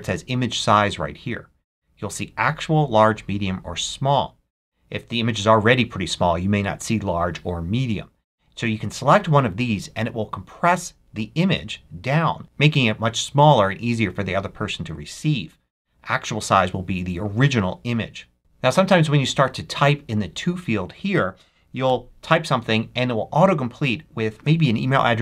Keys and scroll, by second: 21.7 z.